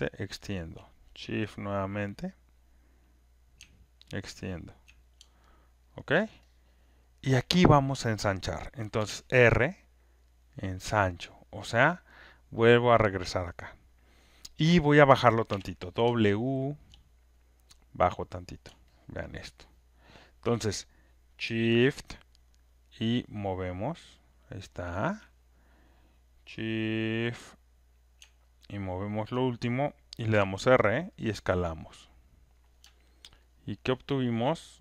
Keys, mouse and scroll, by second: 0.7 alt+click, 5.8 alt+scroll, 6.3 alt+right click, 7.1 alt+middle click, 7.1 alt+click, 11.3-14.1 drag, 15.4 w, 16.8 alt+click, 18.2 click, 20.3 alt+click, 25.0 shift+click, 29.2 shift+click, 32.5 click, 32.5 r, 33.3 alt+right click.